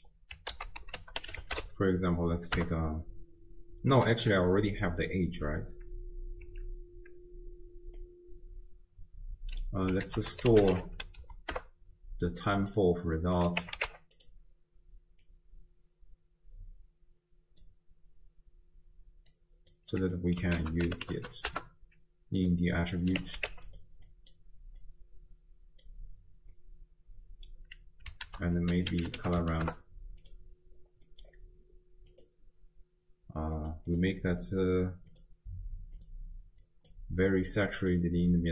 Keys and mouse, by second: 0.5 ctrl+a, 6.5 x, 8.0-9.7 drag, 10.1 ctrl+a, 13.5 click, 15.3-17.8 drag, 19.4 click, 19.9 click, 20.1 middle click, 20.6 ctrl+a, 21.2 t, 23.1 click, 24.1 click, 24.9-26.0 drag, 26.7 click, 28.3 ctrl+a, 31.1 middle click, 32.1 click, 33.6 click, 33.9 click, 35.1 drag, 36.0 click.